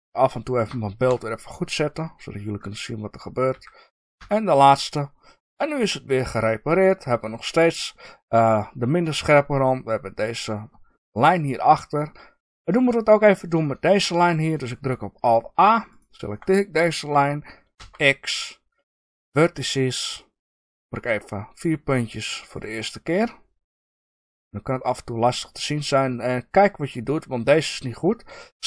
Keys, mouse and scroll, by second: 1.0 KP_3, 3.4 f, 4.8 click, 5.4-11.6 middle drag, 13.6-14.7 shift+middle drag, 15.8 alt+click, 17.7 x, 20.1-20.7 middle drag, 21.2-22.5 scroll up 1, 22.5 shift+click, 23.9 shift+click, 24.4-28.6 middle drag.